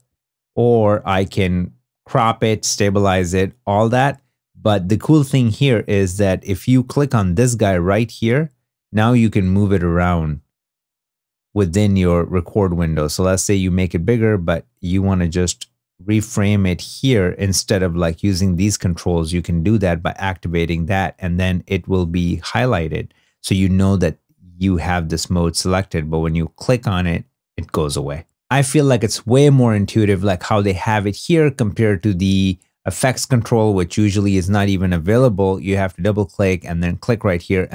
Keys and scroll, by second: 30.8 super+Tab.